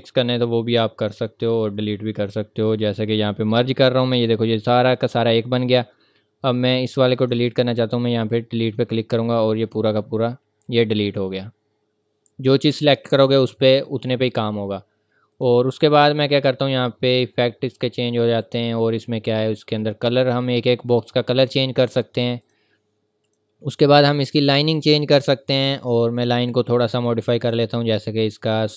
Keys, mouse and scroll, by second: 1.7 right click, 3.5 click, 7.4 right click, 8.6 click, 15.3 click, 18.4 click, 22.4 click, 27.4 click.